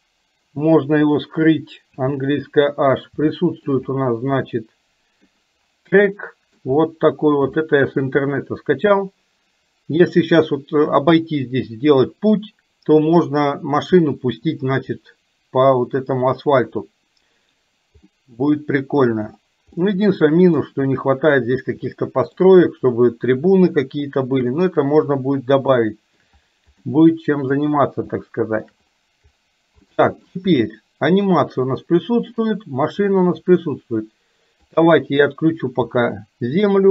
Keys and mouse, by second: 1.1 click, 3.3 middle click, 4.5 middle click, 6.2 middle click, 7.6 shift+middle click, 18.1-19.1 middle drag, 19.8 middle click, 22.1 shift+middle click, 24.6 middle click, 25.8 shift+middle click, 27.1 middle click, 28.2 shift+middle click, 30.0 middle click, 30.7-32.5 shift+middle drag, 34.8 click.